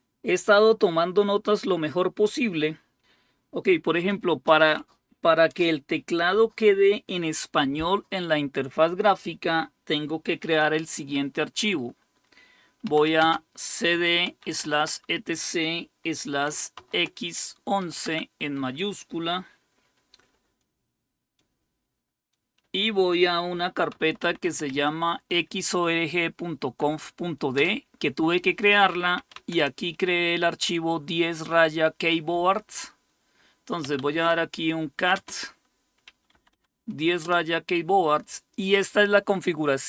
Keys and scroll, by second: 12.8-15.0 typing, 16.5-17.8 typing, 18.0 Tab, 23.7-24.9 typing, 27.5 Return, 28.9-29.8 typing, 33.6-37.2 typing.